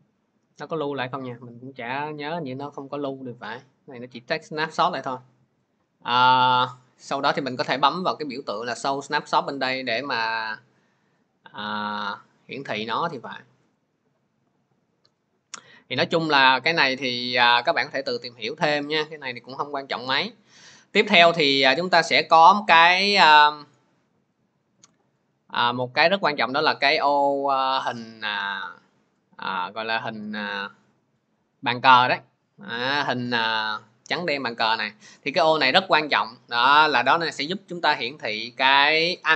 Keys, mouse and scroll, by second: 6.4 scroll, 9.3 click, 11.9 click, 24.3 click, 24.7 click.